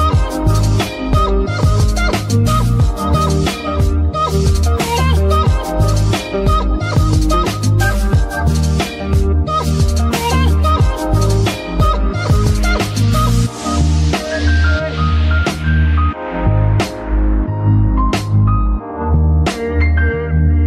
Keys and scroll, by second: 15.0-18.8 typing, 19.0 Return, 20.5 BackSpace.